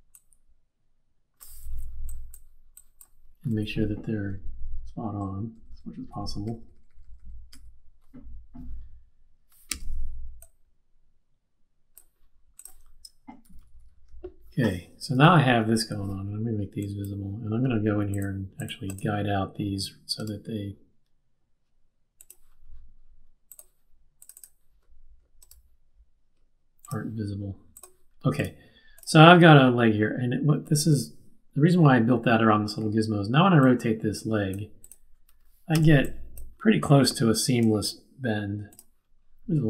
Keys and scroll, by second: 1.7 z, 4.1 Up, 4.2 Up, 4.8 Up, 5.1 Right, 5.5 Down, 5.6 Down, 6.0 Up, 6.4 Right, 6.7 Right, 6.9 Right, 7.4 Right, 9.7 q, 13.4 super+-, 14.0 super+-, 15.1 super+-, 35.7 z.